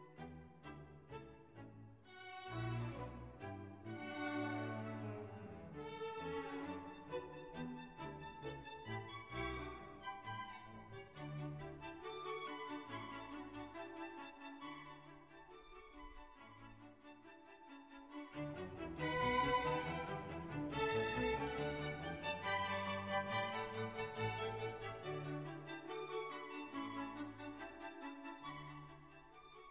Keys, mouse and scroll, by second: 2.5-7.7 ctrl+alt+shift+drag, 9.0 Return, 13.0 click, 13.9 click, 14.3 Left, 23.7 Left, 26.2 click, 26.8 right click, 28.1 click.